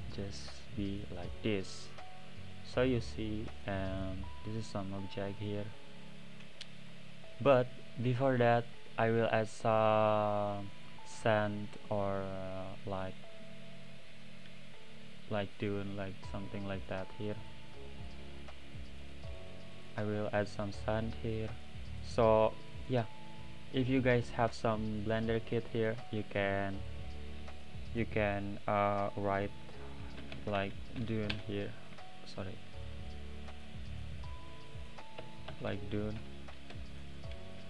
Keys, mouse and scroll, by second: 0.5 middle click, 3.5 click, 4.2-4.7 scroll up 5, 4.7 right click, 4.7 middle click, 5.3 middle click, 5.6 scroll down 3, 5.9-6.8 right drag, 5.9 middle click, 6.8 click, 7.2 click, 17.4 click, 18.0 click, 18.3 click, 18.7 click, 19.0 click, 19.4 click, 19.7 click, 20.3 right drag, 20.3 middle click, 20.5-21.2 scroll up 1, 21.2 scroll down 1, 21.3-22.0 right drag, 21.3 middle click, 22.0 click, 25.8 click, 26.7-29.9 drag, 30.7 n, 33.8-36.8 drag, 36.9 BackSpace.